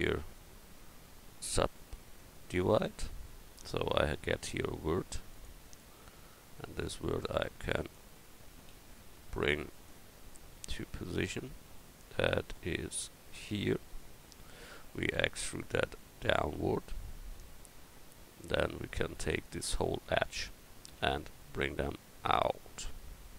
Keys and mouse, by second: 5.3-8.7 drag, 8.7 ctrl+z, 15.2 e, 19.3-20.9 drag, 20.9 e, 21.7-23.3 drag.